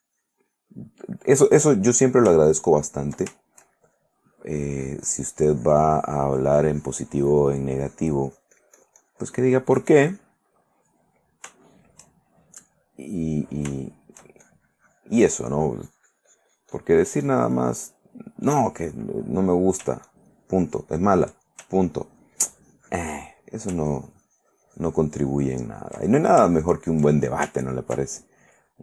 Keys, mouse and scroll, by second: 1.9 ctrl+middle click, 2.6 ctrl+click, 3.5 ctrl+shift+middle click, 4.5-10.7 ctrl+shift+drag, 11.0 middle click, 11.3 shift+middle click, 12.6 shift+middle click, 13.8 shift+middle click, 14.1 shift+middle click, 14.6-18.3 shift+drag, 18.6 middle click, 20.2-21.4 ctrl+drag, 22.2-23.4 ctrl+drag, 23.4 ctrl+middle click, 24.1-26.2 ctrl+drag, 26.6 ctrl+click, 27.9 ctrl+middle click, 28.4 ctrl+click.